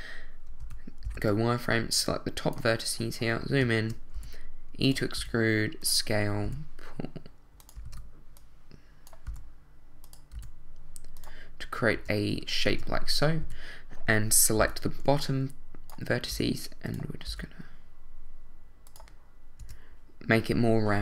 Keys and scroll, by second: 0.6 z, 1.0 b, 4.1 shift+e, 5.0 e, 5.1 s, 6.4 e, 7.8 super+z, 9.2 e, 10.3 s, 11.9 Tab, 13.4 a, 14.6 b, 16.3 e, 17.2 s, 19.6 Tab.